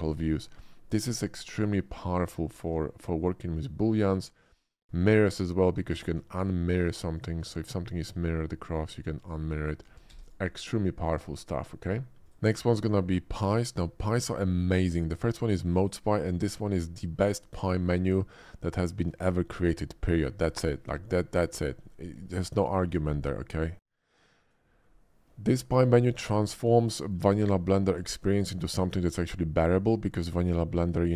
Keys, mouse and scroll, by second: 1.0 shift+middle drag, 2.3-2.6 shift+middle drag, 3.0-4.0 shift+middle drag, 4.5 shift+middle click, 4.8 shift+middle click, 7.1 shift+click, 8.4-8.7 shift+middle drag, 9.8 a, 10.0 x, 10.1 a, 10.2 click, 10.8 middle drag, 12.8 middle click, 15.8 click, 16.4 shift+middle drag, 22.8 shift+a, 24.3 click, 25.4 shift+middle drag, 26.9 shift+middle click, 27.8 shift+middle click, 28.1 shift+middle click, 28.9 shift+middle click, 29.3 shift+middle click, 29.7-30.8 shift+middle drag.